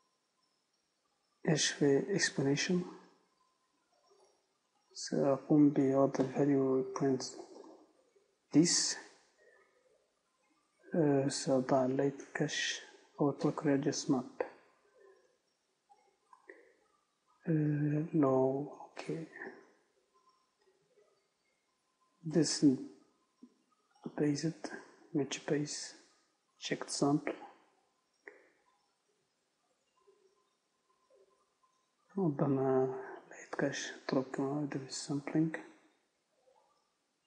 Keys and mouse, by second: 15.6-24.4 drag, 25.6-37.2 drag.